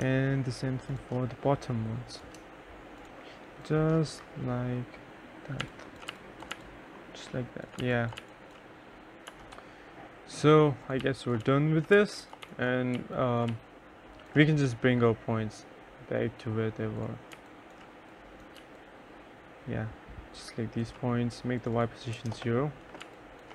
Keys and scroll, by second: 5.7-8.1 typing, 8.6 F1, 10.8-12.8 typing, 16.7 3, 21.5-23.5 typing, 21.6 Return.